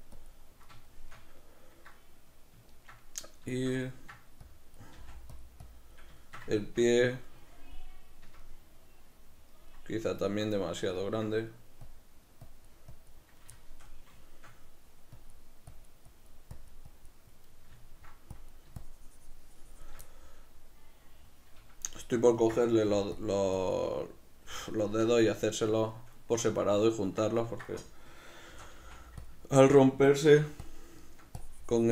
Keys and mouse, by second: 0.9-4.5 shift+middle drag, 4.5 click, 5.0 f, 5.7 click, 6.3-11.9 shift+middle drag, 11.9-13.6 drag, 13.6-15.2 shift+middle drag, 15.2-17.6 drag, 17.6 middle click, 18.4-20.1 drag, 20.1-23.3 middle drag, 22.9 f, 23.7 click, 24.1-29.3 middle drag, 28.6 shift+c, 29.3 click, 29.5-30.8 ctrl+middle drag, 30.5 f, 30.8 click, 31.1 ctrl+middle click, 31.5-31.9 drag.